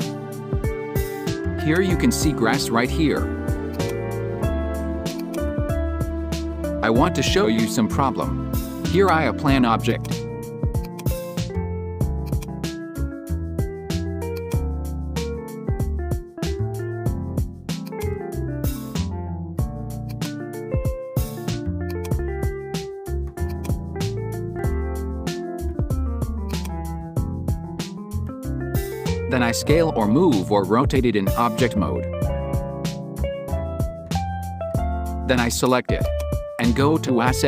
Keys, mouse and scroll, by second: 1.8-2.9 drag, 3.8 click, 5.1 drag, 6.2-8.7 drag, 8.9-14.5 drag, 17.9 click, 18.4 scroll down 1, 20.1 click, 21.9 click, 23.6-26.6 drag, 28.8 s, 32.1-34.6 scroll down 2, 34.6 scroll down 1, 35.5 click.